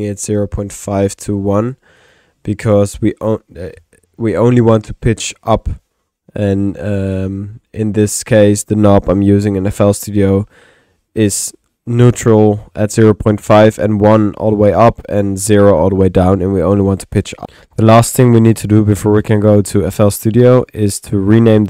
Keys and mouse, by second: 2.1 click, 17.2-17.9 typing, 17.5 click, 18.4 click, 19.6 click, 20.6-21.6 drag, 21.5 Tab.